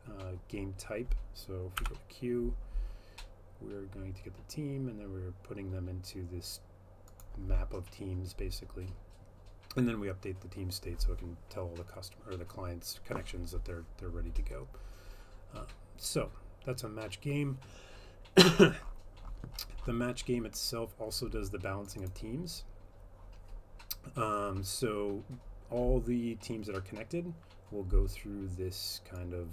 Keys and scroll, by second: 1.8 F12.